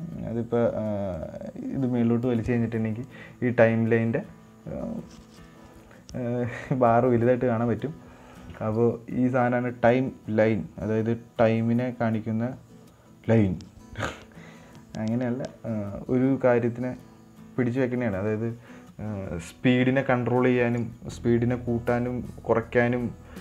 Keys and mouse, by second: 1.7-8.2 drag.